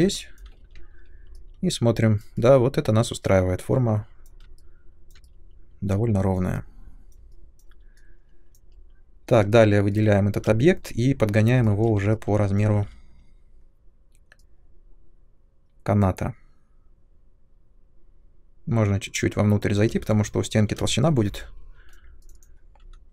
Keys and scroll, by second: 0.7 ctrl+1, 10.4 ctrl+space, 12.7 r, 19.8 space, 20.8 ctrl+space.